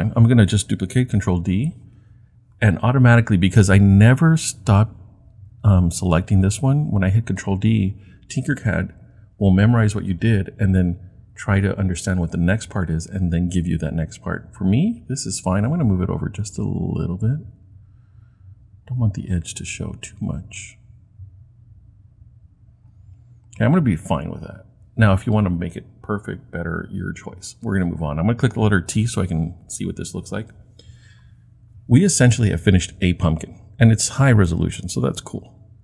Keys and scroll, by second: 1.2 super+d, 29.0 t.